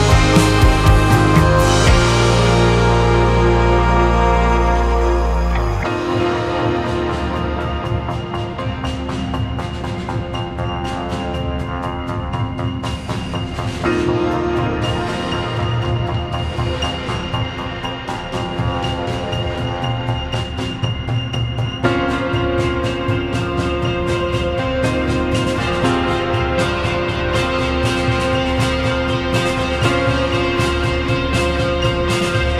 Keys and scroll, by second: 15.2-17.0 typing, 18.8-20.3 typing, 20.5 Return.